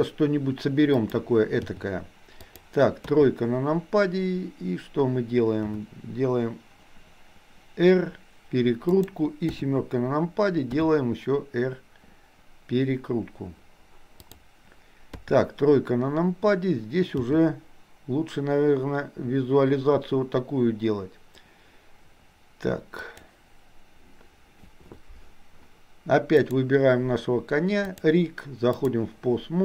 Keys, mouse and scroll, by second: 1.7 g, 3.1 KP_3, 5.7 r, 9.5 KP_7, 10.9 r, 15.2 KP_3, 17.2 g, 26.4 click, 27.9-29.0 drag.